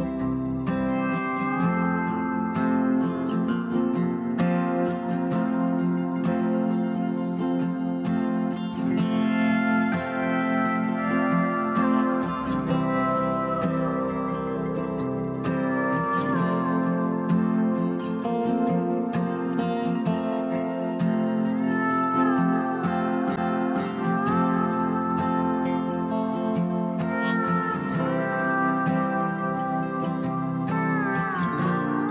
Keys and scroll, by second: 11.6 ctrl+t, 19.3 ctrl+=, 24.6 ctrl+0, 24.9 ctrl+-.